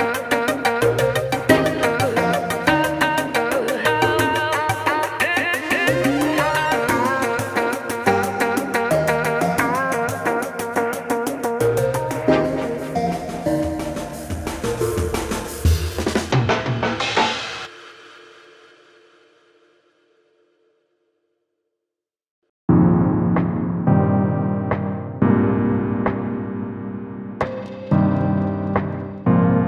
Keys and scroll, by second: 4.5 ctrl+j, 11.5 ctrl+t.